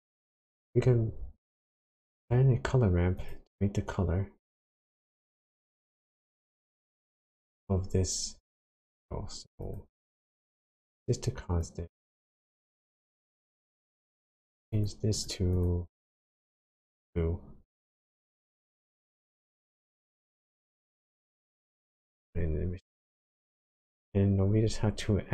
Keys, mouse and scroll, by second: 1.9 shift+a, 7.1 click, 9.6 click, 11.6 click, 13.4 click, 14.7 click, 15.5 click, 20.1 click, 20.8 click, 22.6-23.1 scroll down 4, 23.2 middle click, 24.0 scroll up 1, 24.2-25.1 scroll down 6.